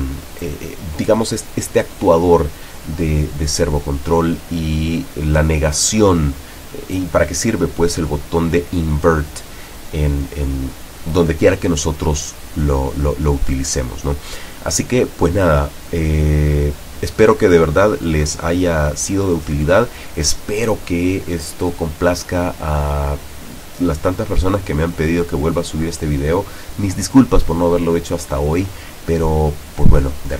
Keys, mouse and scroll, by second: 0.3-1.3 drag.